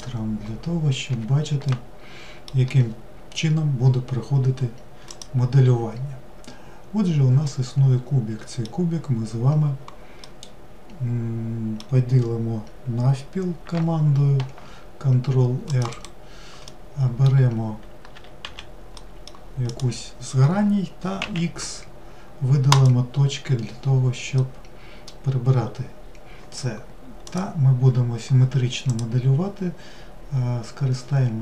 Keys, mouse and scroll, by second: 0.0-1.1 drag, 1.1 n, 1.7-4.7 middle drag, 5.1 click, 7.5-13.3 middle drag, 16.7-18.2 middle drag, 18.2 4, 19.0-19.7 middle drag, 19.7 click, 24.4-25.6 middle drag, 25.6-26.6 scroll up 2, 26.6-27.3 scroll up 1, 27.3 click.